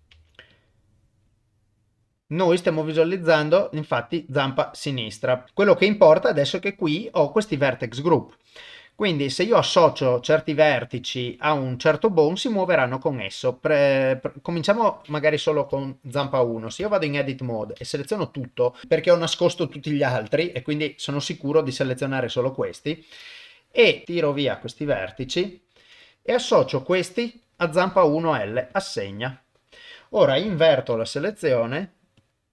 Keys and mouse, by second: 0.1 ctrl+Tab, 0.5 click, 5.4 ctrl+z, 5.5 middle click, 14.1 click, 15.8 ctrl+middle click, 16.4 shift+middle click, 16.8 Tab, 17.8 a, 20.0 click, 24.0 ctrl+shift+right click, 24.0 shift+middle click, 24.5 ctrl+shift+click, 28.7 click, 30.9 ctrl+i, 32.2 click.